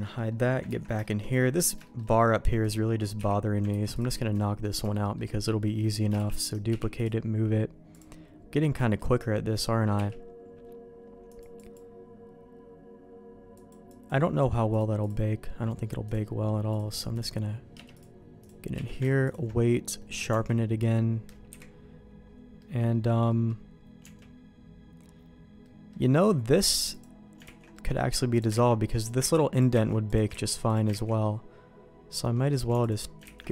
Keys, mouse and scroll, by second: 0.0 middle click, 0.7 ctrl+s, 1.0 shift+middle click, 1.6 click, 1.8 shift+middle click, 2.6 click, 3.1 h, 3.7 ctrl+s, 3.9 click, 4.4 middle click, 4.9 shift+middle click, 6.1 shift+d, 6.7 m, 7.9 click, 8.8 middle click, 9.9 q, 11.3 click, 11.3 q, 11.5 click, 13.5 click, 13.9 click, 14.7 click, 16.9 click, 18.0 click, 18.7 q, 20.0 middle click, 20.3 Tab, 20.6 middle click, 21.5 KP_Decimal, 22.6 middle click, 23.2 middle click, 24.0 Tab, 25.6 middle click, 26.9 click, 27.4 ctrl+x, 27.7 middle click, 28.3 click, 28.5 ctrl+x, 29.0 click, 29.3 ctrl+x, 29.5 click, 29.8 ctrl+x, 30.0 click, 30.4 ctrl+x, 30.6 click, 31.0 ctrl+x, 31.2-32.3 middle drag, 33.4 ctrl+x.